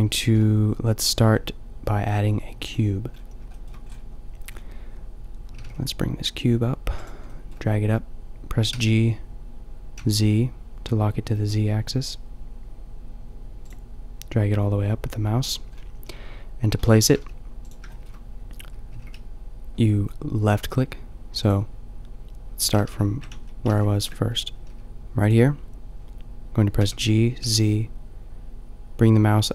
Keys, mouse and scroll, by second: 0.5 shift+a, 3.2-3.9 middle drag, 5.6 g, 7.0-9.9 drag, 8.7 g, 13.7-15.7 drag, 15.7-16.7 middle drag, 16.7 click, 17.1 g, 17.7-20.6 drag, 18.9 g, 21.5-22.1 drag, 22.7 ctrl+z, 23.3 ctrl+z, 23.7 ctrl+z, 26.8 g, 27.1 click.